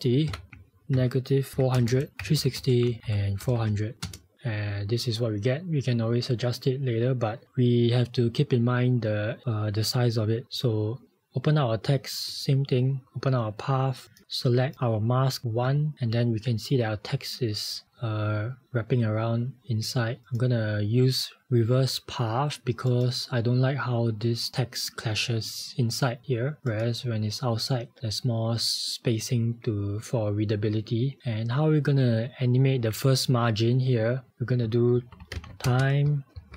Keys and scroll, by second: 3.7 2, 4.2 Return, 34.8-36.4 typing.